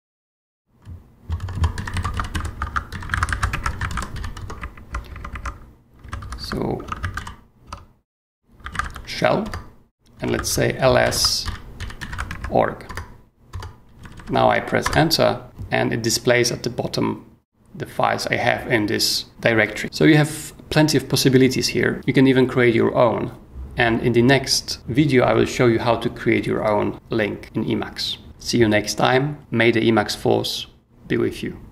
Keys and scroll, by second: 0.0-6.7 typing, 6.8 ctrl+e, 7.0 ctrl+c, 7.1 ctrl+l, 8.5-12.8 typing, 9.4 Return, 12.8 Return, 14.0 h, 14.8 Return, 15.4 y, 19.8 super+Tab.